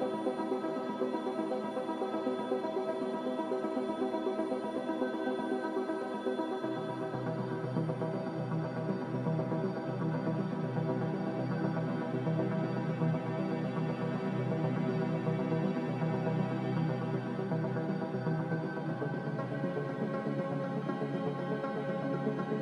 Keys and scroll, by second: 2.0-3.0 typing, 2.3 Return, 6.5 2, 6.5 0, 6.8 Return, 10.3 a, 12.8 s, 13.9 z, 16.4 s, 17.6 `, 17.7 Escape, 17.8 Escape, 18.9 g, 21.4 Escape, 21.4 s.